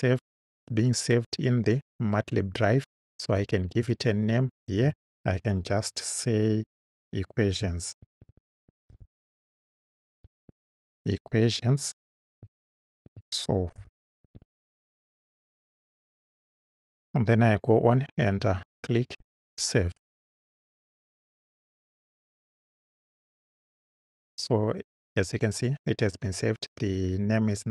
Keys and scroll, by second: 7.7-10.5 typing, 12.9-14.9 typing.